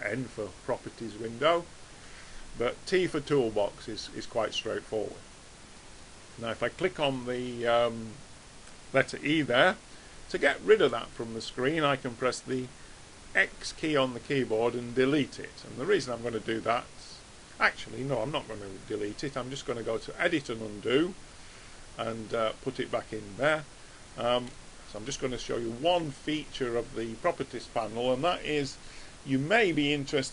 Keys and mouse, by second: 0.6 n, 2.0 n, 3.1 t, 4.0 t, 6.0 click, 10.9-13.7 middle drag, 13.7 x, 19.7 click, 23.1-27.5 middle drag.